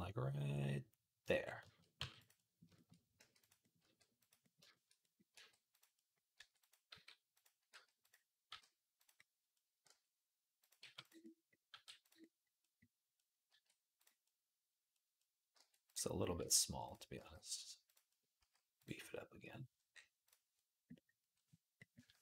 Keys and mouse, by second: 1.8 g, 3.0 g, 3.6 r, 5.1 r, 6.2 r, 6.7 s, 7.5 g, 8.3 g, 9.7 r, 10.6 g, 11.5 g, 13.3 g, 15.4 g, 16.2 r, 17.0 s, 18.2 s.